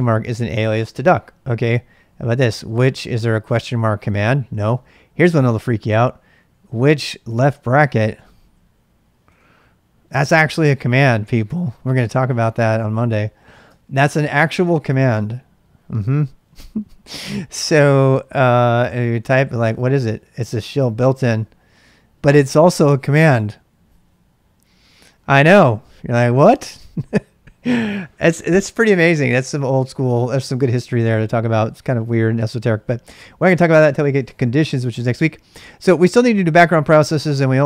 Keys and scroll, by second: 1.9-3.5 typing, 5.2-9.2 typing, 13.7 ctrl+[, 14.3 k, 18.4-19.8 typing, 35.5-36.8 typing.